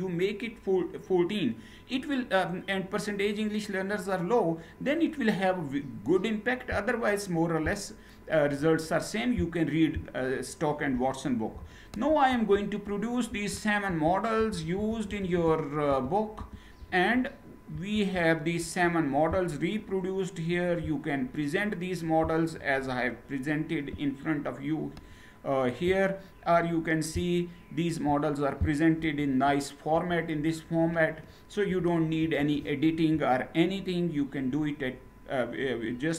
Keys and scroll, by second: 11.8 ctrl+Return, 13.0 ctrl+Return, 13.5 ctrl+Return, 14.1 ctrl+Return, 14.4 ctrl+Return, 14.7 ctrl+Return, 15.1 ctrl+Return, 15.5 ctrl+Return, 16.1 ctrl+Return, 17.4 ctrl+Return, 28.9 Page_Up, 29.7 Page_Up, 31.4 Page_Down, 31.9 Page_Down.